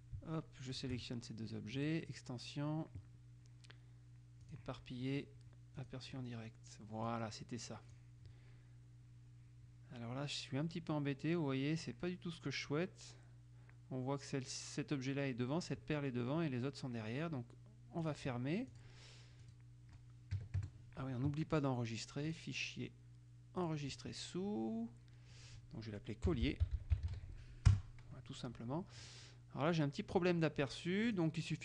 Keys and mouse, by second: 0.9 shift+click, 1.9 click, 4.6 click, 5.9 click, 8.0 click, 18.2 click, 18.8 click, 19.6 click, 20.6 KP_Subtract, 20.8 KP_Add, 22.5 click, 23.8 click, 26.2-27.8 typing, 27.8 Return, 29.2 click, 31.2 click.